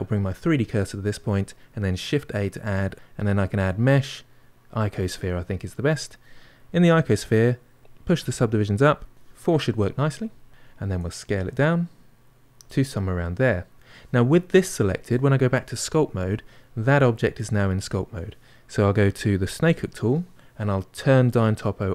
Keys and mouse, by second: 7.8 click, 8.8-11.2 drag, 11.2 s, 12.9-15.8 middle drag, 15.8 click, 19.4-21.9 drag.